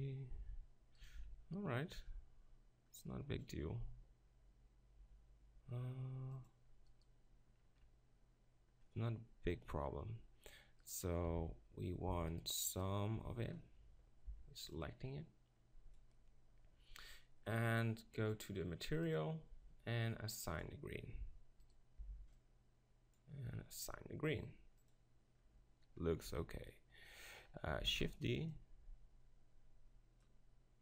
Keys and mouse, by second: 1.2 ctrl+r, 7.6 middle click, 7.6-8.8 right drag, 10.9-17.8 right drag, 11.3 b, 14.3 b, 20.6-21.7 drag, 21.7 middle click, 22.0 b, 22.3 click, 22.8-24.9 right drag, 24.9 click, 26.3 Tab, 27.9 shift+d.